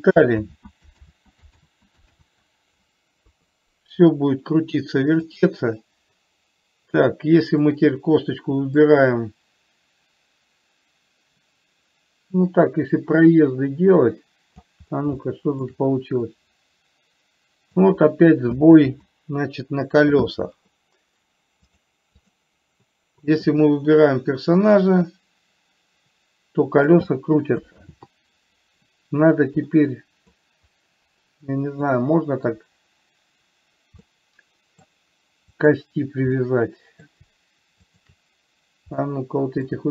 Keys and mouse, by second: 0.7 ctrl+z, 1.5 ctrl+z, 2.0 ctrl+z, 3.6 KP_3, 5.6 click, 9.2-15.0 drag, 15.6 shift+middle click, 16.6-18.2 drag, 19.1 ctrl+z, 22.0 click, 25.4-27.4 drag, 28.2 ctrl+z, 30.1 middle click, 34.5-35.2 middle drag, 36.0 drag, 36.7-37.5 middle drag, 38.1 shift+click, 39.4-39.9 middle drag.